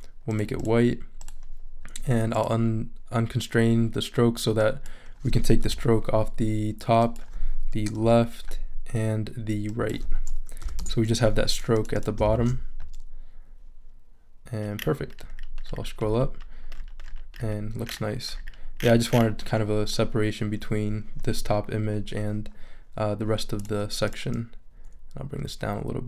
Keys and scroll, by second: 5.6 0, 8.0 0, 10.6 0, 10.8 Return, 12.3 shift+super+e.